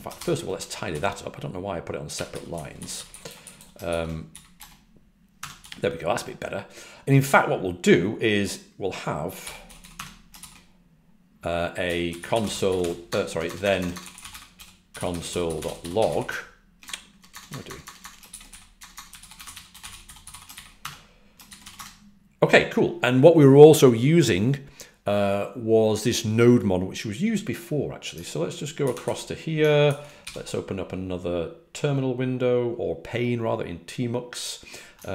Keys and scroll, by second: 2.0-4.0 typing, 5.0-6.0 typing, 9.1-9.9 typing, 12.1-17.0 typing, 18.4-21.6 typing.